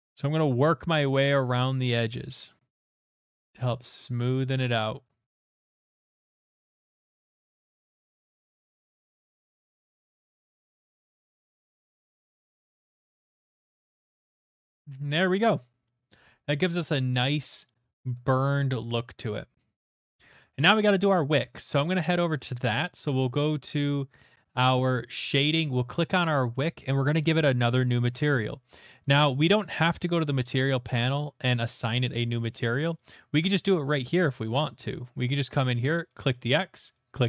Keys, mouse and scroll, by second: 0.0 click, 0.3 click, 0.8 click, 1.5 click, 1.8 click, 2.4 click, 2.7 click, 3.0 click, 3.2 click, 3.4 click, 4.0 click, 4.5 click, 5.3 click, 5.4 click, 5.6 click, 6.0 click, 6.1 click, 6.3 click, 6.5 click, 6.7 click, 7.1 click, 7.3 click, 7.5 click, 7.8 click, 8.0 click, 8.2 middle click, 8.5 click, 8.7 click, 8.8 ctrl+z, 8.9 ctrl+z, 9.1 click, 9.5 ctrl+z, 9.5 middle click, 10.0 click, 10.1 click, 10.4 click, 10.6 click, 10.8 click, 11.0 middle click, 11.0 middle click, 11.0 middle click, 11.2 middle click, 11.3 middle click, 11.5 middle click, 11.5 middle click, 11.7 middle click, 12.8 middle click, 13.1 middle click, 13.1 shift+middle click, 13.3 middle click, 13.4 click, 13.5 click, 13.7 click, 13.8 click, 13.9 click, 14.0 middle click, 14.1 middle click, 14.2 middle click, 14.3 shift+middle click, 14.9 shift+middle click, 15.0 middle click, 15.0 middle click, 15.0 middle click, 15.1 middle click, 15.1 shift+middle click, 16.1 middle click, 16.1 middle click, 16.1 middle click, 16.2 middle click, 16.3 middle click, 17.6 shift+middle click, 18.1 shift+middle click, 18.5 middle click, 19.0 shift+middle click, 19.3 middle click, 19.7 middle click, 20.4 middle click, 20.5 shift+middle click, 24.9 click, 25.5 click, 26.1 middle click, 30.4 click, 31.2-33.8 drag, 33.8 middle click, 36.1 click, 36.9 click.